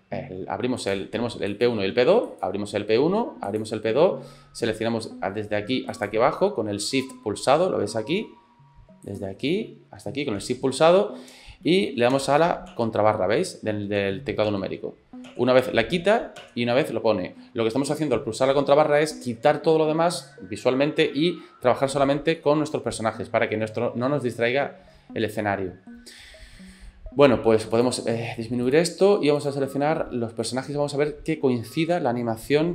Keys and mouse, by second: 0.8 click, 1.5 click, 3.5 click, 5.9 shift+click, 9.2 click, 12.3 KP_Divide, 12.3 middle click, 12.8 KP_Divide, 14.1 KP_Divide, 14.6 KP_Divide, 15.4 KP_Divide, 16.5 KP_Divide, 22.4-24.3 middle drag, 25.4 middle click, 27.8 click, 28.7 click, 30.4-31.9 middle drag.